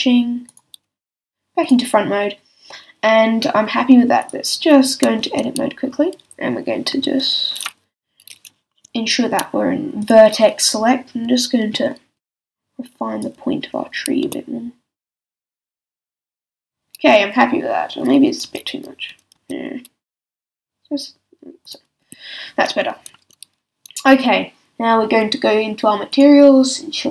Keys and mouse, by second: 5.2 Tab, 6.9 b, 10.0-11.8 drag, 12.1 b, 14.2 s, 16.2-18.0 drag, 16.5 a, 18.4 z, 19.3 z, 20.3 s, 22.0 a, 23.1 Tab, 26.1-27.1 drag.